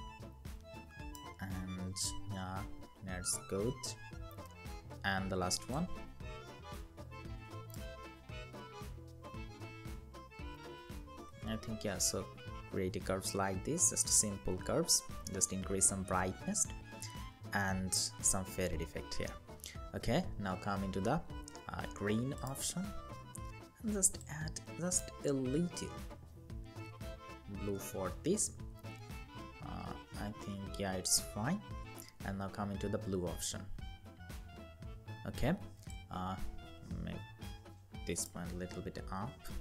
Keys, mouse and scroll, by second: 1.1 Up, 7.6 Left, 8.1 Left, 8.8 Down, 9.0 Down, 10.6 Down, 25.6 Left, 26.0 Up, 26.5 Right, 26.8 Right, 28.7 Down, 29.0 Down, 29.5 Down, 38.3 Down, 38.5 Down, 39.1 Down.